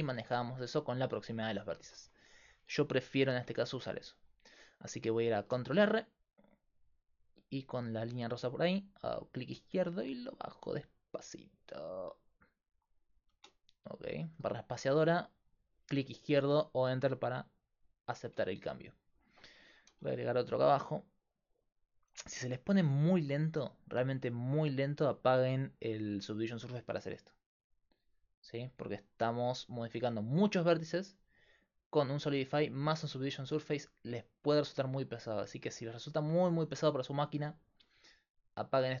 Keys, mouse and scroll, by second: 1.7-3.7 middle drag, 3.7 ctrl+r, 5.6 ctrl+r, 14.9-21.7 middle drag, 19.9 ctrl+r, 26.6-28.4 drag, 28.7 space, 33.8 middle click, 34.6 Tab, 37.7-39.0 drag.